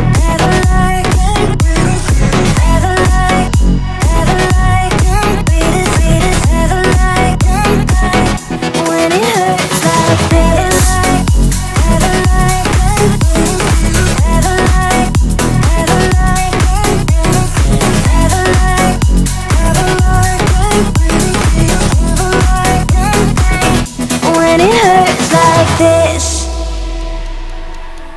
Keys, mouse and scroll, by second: 2.0 F7, 2.3 click, 7.8 alt+scroll down 1, 9.5-12.6 drag, 14.6 click, 16.8 click, 20.3 right click, 21.8 click, 26.7 click.